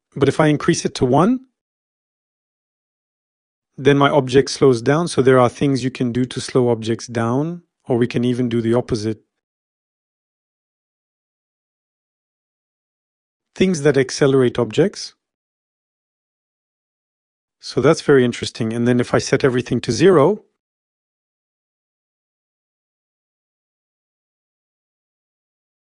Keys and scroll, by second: 3.1 Home, 3.5 0, 23.0 0, 23.1 Return.